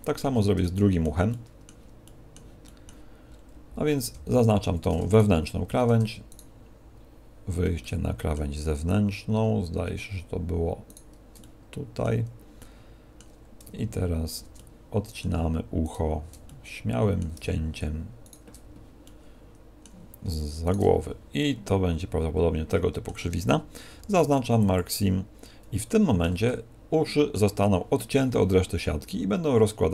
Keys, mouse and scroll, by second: 0.2 z, 0.6 shift+middle click, 1.2 middle click, 2.0 middle click, 2.6 middle click, 3.2-4.2 scroll up 2, 4.2 scroll up 2, 4.5 a, 5.0 alt+shift+right click, 6.2 shift+right click, 7.8 middle click, 10.8 shift+right click, 11.4 middle click, 12.5 middle click, 14.4 middle click, 15.8 alt+shift+right click, 16.4 middle click, 18.2 alt+shift+right click, 19.0 middle click, 20.6 shift+right click, 20.9 z, 21.3 middle click, 23.8 ctrl+e, 25.0 scroll down 1, 25.7 scroll down 5, 25.8 shift+middle click, 26.4 middle click.